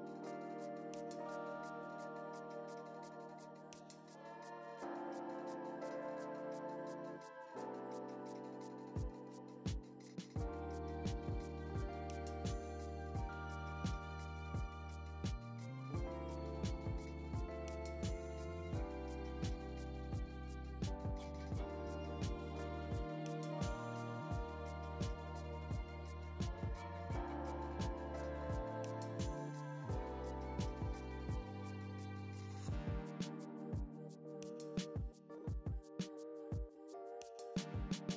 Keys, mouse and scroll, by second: 0.1 click, 0.3 scroll down 1, 0.4 `, 1.5 click, 1.8 `, 2.2-3.6 drag, 3.6 `, 4.4 click, 4.6 `, 5.4 `, 5.7 scroll up 1, 5.8 scroll down 1, 6.0 `, 6.2 scroll up 1, 6.4 `, 7.2 click, 10.7 scroll down 1, 10.9-11.2 scroll up 1, 11.2 scroll down 1, 11.4 `, 11.8 click, 12.2-13.4 scroll up 1, 13.4 click, 13.8 scroll down 1, 14.0 `, 14.6-15.2 scroll up 2, 15.2-15.6 scroll down 1, 15.6-16.6 right drag, 16.6 click, 16.8 `, 17.6 Tab, 17.8 `, 18.1 scroll down 1, 18.2 `, 18.4-18.8 scroll up 2, 19.2 scroll down 1, 19.4 scroll up 1, 20.3 Tab, 20.8 click, 21.9-23.5 shift+drag, 23.5 Tab, 23.7 `, 23.9 a, 25.4 shift+e, 26.0 right click, 27.0 ctrl+e, 28.2 click, 28.3 alt+a, 28.5 click, 28.8 shift+e, 29.6 ctrl+e, 30.1 a, 30.8 ctrl+e, 31.4 alt+a, 31.7 scroll up 1, 31.8 scroll down 1, 32.0 Tab, 32.4 scroll up 1, 32.6 `, 33.0 scroll up 1, 33.8 click, 35.0 ctrl+e, 35.2 right click, 35.3-35.8 scroll up 1, 35.8 ., 36.0 scroll up 1, 36.0 scroll down 1, 36.2 scroll up 1, 36.6 alt+click, 36.8-37.2 scroll up 1, 37.2 ctrl+e, 37.8 click, 38.0 a.